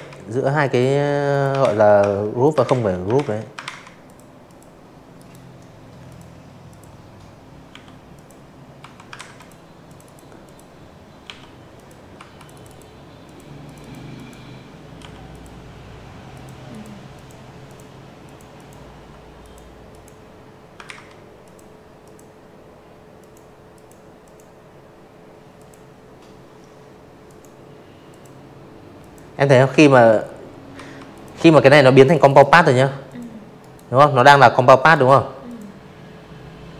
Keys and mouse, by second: 0.1 ctrl+z, 0.5 ctrl+z, 0.9 click, 1.4 click, 2.1 right click, 3.0 click, 3.6 click, 4.6 i, 5.0 click, 5.7 v, 6.1 ctrl+z, 6.3 click, 6.8 click, 6.9 click, 7.3 click, 8.2 i, 8.6 click, 9.1 v, 9.2 click, 9.4 click, 9.6 click, 10.1 click, 10.6 click, 10.7 click, 11.1 click, 11.9 i, 12.2 click, 13.2 click, 13.6 click, 14.1 click, 14.5 click, 15.1 click, 15.5 click, 16.3 click, 16.8 click, 17.8 ctrl+z, 18.3 click, 18.9 click, 20.1 click, 20.6 click, 21.1 click, 22.5 click, 24.2 click, 25.0 click, 25.9 click, 26.7 ctrl+z, 27.7 v, 28.1 click, 28.9 click, 29.0 click, 29.2 click, 30.0 click, 30.5 right click, 31.7 click, 32.3 click, 35.0 click, 35.2 click, 35.6 click.